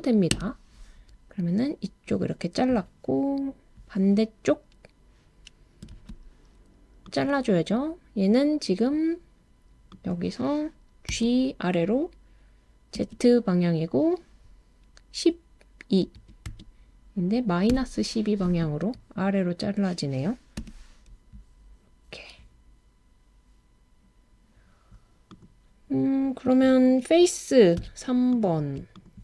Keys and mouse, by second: 0.3 Return, 5.9 super+r, 9.9 click, 11.1 g, 13.0 z, 16.4 2, 17.7 -, 20.6 Return, 27.8 3, 29.0 shift+click.